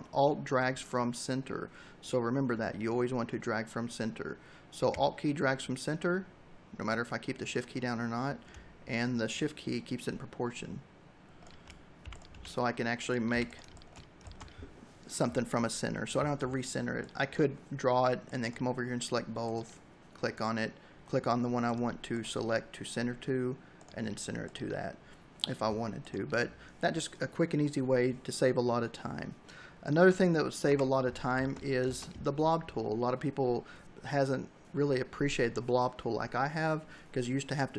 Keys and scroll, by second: 11.9 c, 13.2 v, 13.5 space, 30.5 Delete, 30.8 v, 31.1 space.